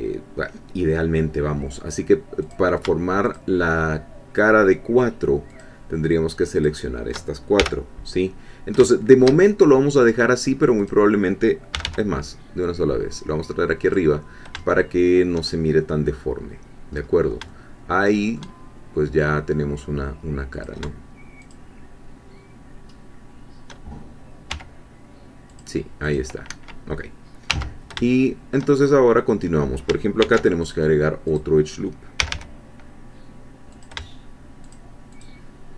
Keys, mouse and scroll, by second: 2.5 click, 3.2 shift+click, 5.6-6.8 shift+drag, 7.6 shift+f, 8.4 middle click, 8.4 scroll down 2, 8.9 shift+click, 10.8 click, 11.7 g, 13.8 click, 14.9 shift+middle click, 17.0-17.4 scroll up 1, 17.5-18.9 shift+middle drag, 19.2-20.5 scroll down 1, 20.5 shift+click, 21.5-23.7 shift+drag, 24.5 3, 25.5 click, 27.5 1, 28.1 shift+middle click, 30.2 ctrl+r, 30.6 ctrl+click, 31.3 click, 32.2 g, 33.7 shift+click, 34.7 shift+click.